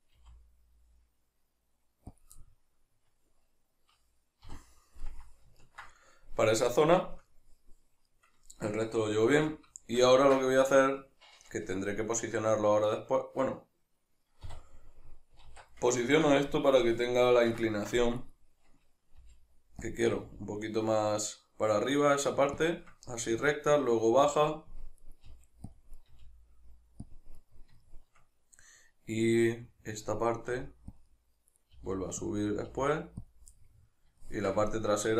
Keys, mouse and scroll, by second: 0.2 g, 2.2 click, 2.4-9.8 middle drag, 4.5 KP_Divide, 9.3 alt+q, 14.4 KP_Divide, 15.5 alt+q, 16.0-18.2 ctrl+middle drag, 18.2 right click, 19.2 g, 20.0 click, 20.1 right click, 20.2 g, 22.7 shift+click, 25.0 right click, 25.3 g, 25.8 click, 26.0-27.2 right drag, 26.1 g, 27.2 click, 27.4 right click, 27.8-30.5 shift+middle drag, 30.5 g, 31.0 middle click, 31.0 click, 31.6 right click, 31.8 g, 32.3 click, 32.5 right click, 32.7 g, 33.4 click, 33.6-35.1 middle drag.